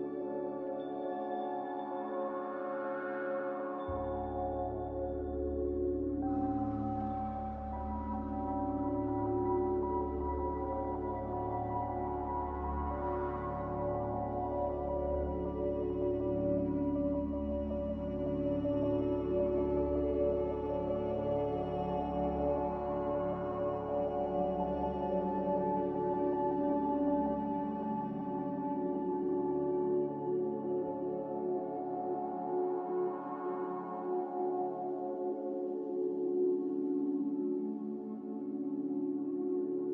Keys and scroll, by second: 29.7 typing, 33.7 x.